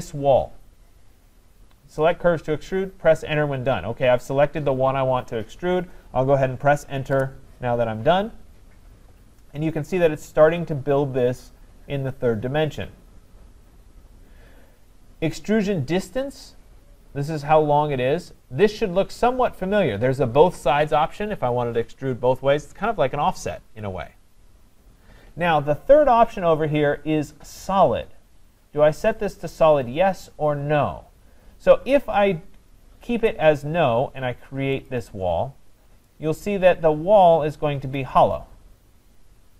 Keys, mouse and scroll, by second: 7.1 Return, 31.2-32.5 scroll, 34.9 click, 35.5 scroll.